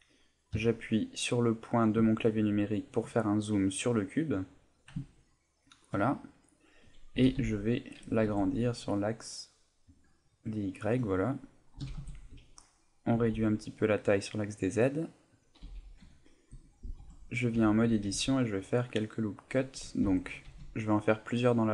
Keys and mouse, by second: 0.5 KP_Decimal, 1.6 middle click, 2.1 ctrl+middle click, 2.5 middle click, 3.8 middle click, 4.6 middle click, 5.0 ctrl+middle click, 5.4 ctrl+middle click, 6.1 middle click, 7.1 s, 10.0 click, 10.2 middle click, 10.6 ctrl+middle click, 11.0 middle click, 11.9 s, 12.4 click, 12.6 middle click, 15.4 click, 15.6 a, 15.9 middle click, 16.6 right click, 17.0 Tab, 17.3 middle click, 17.5 a, 18.0 ctrl+r, 19.4 right click, 20.0 ctrl+z, 20.5 ctrl+r.